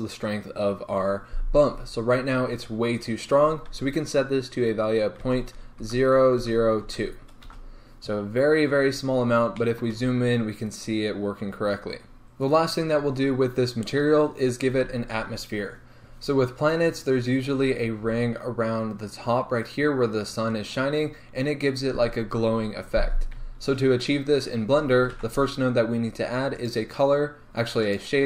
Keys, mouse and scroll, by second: 7.7 Return, 8.8 scroll up 1, 9.7-10.7 shift+middle drag, 10.2 scroll up 1, 11.7 scroll down 1, 12.2 g.